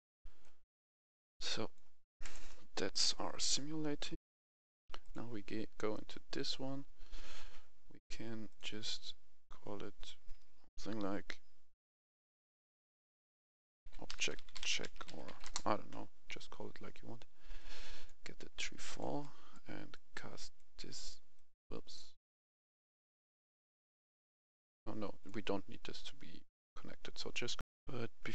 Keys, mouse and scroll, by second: 2.3 right click, 4.1 F11, 4.9 click, 5.8 right click, 6.3 scroll up 1, 7.4 scroll up 1, 8.3 click, 9.1 F2, 13.7-15.2 typing, 15.3 Return, 17.4-25.1 drag, 27.5 F11, 27.6 F10.